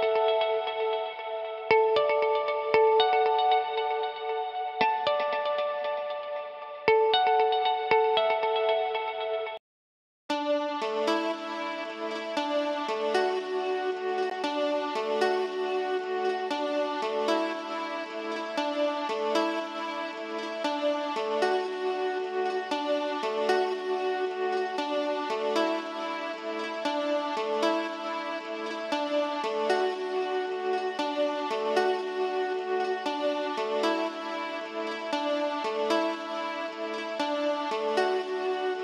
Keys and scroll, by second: 9.4 s.